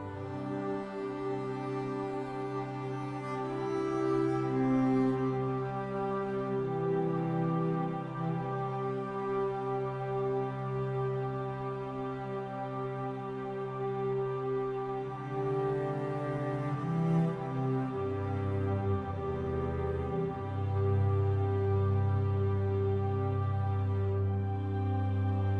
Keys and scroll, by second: 2.4 ctrl+d.